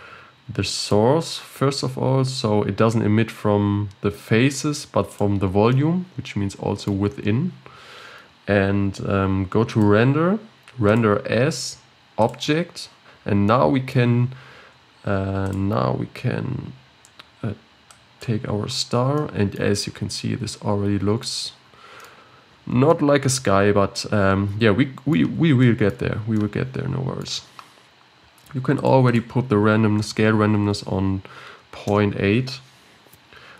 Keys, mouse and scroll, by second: 5.7-8.5 middle drag, 8.5-9.2 scroll down 1, 9.2-9.7 scroll down 2, 9.7-13.1 drag, 13.1-13.5 scroll down 1, 13.5-14.7 middle drag, 14.7-15.4 scroll down 2, 15.4-18.5 drag, 19.2-19.8 middle drag, 19.8-20.2 scroll up 5, 20.2-21.6 middle drag, 21.6-22.0 scroll down 5, 22.0 middle click, 22.1-22.9 scroll up 8, 22.9-26.1 middle drag, 26.1 scroll down 5, 26.3-28.8 middle drag, 28.8 click.